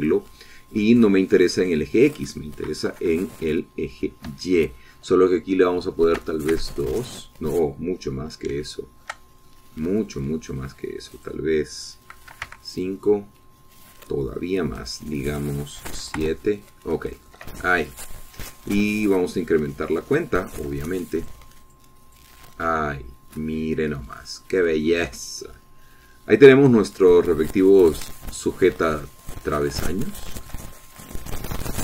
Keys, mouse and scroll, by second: 0.5 click, 2.8 click, 4.1 KP_0, 5.5 Tab, 7.4 KP_2, 7.8 KP_Enter, 9.8-12.4 shift+middle drag, 12.4 click, 13.5 KP_5, 13.7 KP_Enter, 16.1 click, 17.1-18.5 drag, 17.1 KP_7, 17.4 KP_Enter, 18.5-19.7 middle drag, 21.8 click, 22.4 click, 22.9 click, 23.3 click, 23.8-26.3 middle drag, 28.9 click, 30.2 click, 31.3 shift+middle click.